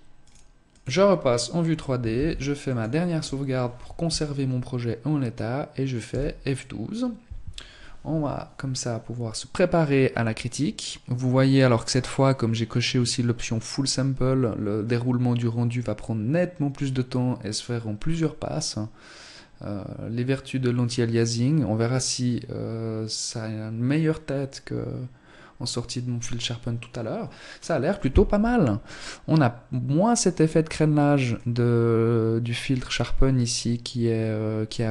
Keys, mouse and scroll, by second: 0.8 ctrl+s.